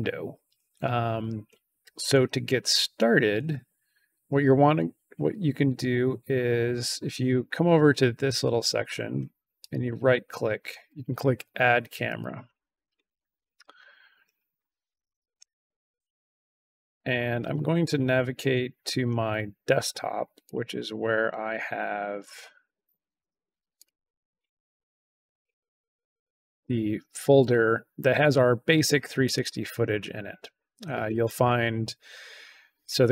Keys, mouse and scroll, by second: 9.5 right click, 12.1 click, 15.9 click, 17.4-17.9 scroll down 2, 20.4 click, 23.7 click, 24.2-24.5 scroll down 2, 25.2 click, 29.1 click, 29.3 click.